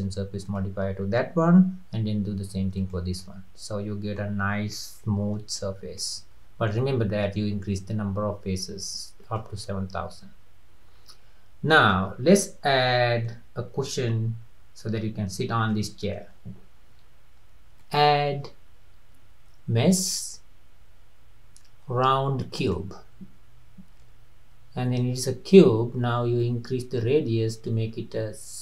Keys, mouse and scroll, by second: 0.5 click, 2.4 ctrl+1, 2.8 drag, 3.3-4.4 middle drag, 4.4-4.7 scroll up 2, 4.7-5.8 middle drag, 5.8 scroll down 2, 6.0-9.1 middle drag, 9.2 drag, 9.7-12.1 middle drag, 12.1-12.4 scroll down 3, 12.4-15.4 middle drag, 15.8-17.8 middle drag, 17.8-21.0 drag, 26.4-28.6 drag.